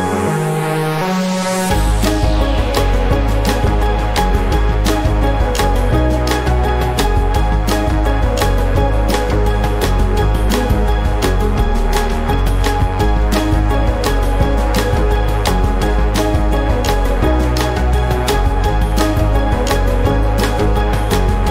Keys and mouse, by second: 2.2 click, 4.4-5.5 drag, 6.4 ctrl+z, 8.8 click, 10.0 click, 10.8 click, 11.2-12.8 typing, 14.1 F12, 15.1 space, 19.5 click, 20.2 click.